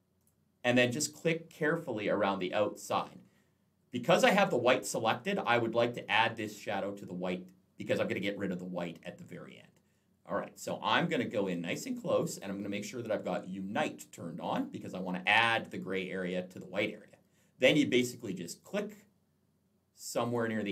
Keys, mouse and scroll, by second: 0.0 click, 3.2 alt+scroll down 1, 10.4 alt+scroll up 1, 20.1 click.